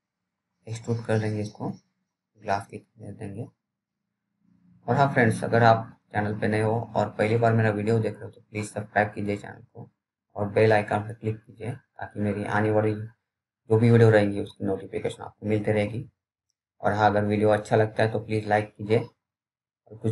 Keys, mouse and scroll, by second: 0.7-2.4 scroll down 1, 4.4-5.5 scroll up 1, 8.7 click, 13.0 right click, 15.1 click, 15.1 click, 18.4 scroll up 1, 19.8 click.